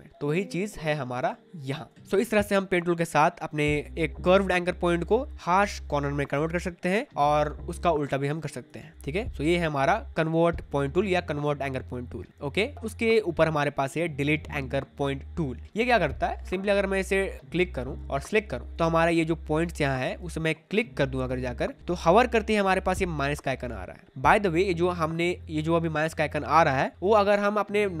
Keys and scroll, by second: 1.2 space, 18.7 space.